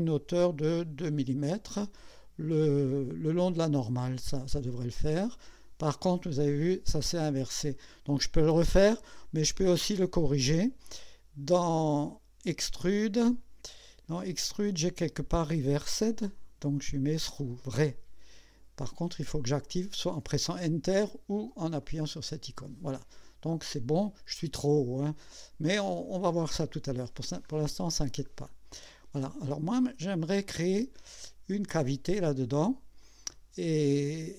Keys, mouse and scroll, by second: 1.0 KP_2, 4.3 click, 6.3-8.1 drag, 12.5 click, 13.4 scroll down 1, 15.9 click, 16.4 click, 17.3 click, 21.8 click, 22.9-25.1 drag, 25.3-27.1 drag, 27.6 scroll up 2, 28.3 scroll down 2, 28.9 click, 33.0-34.3 drag.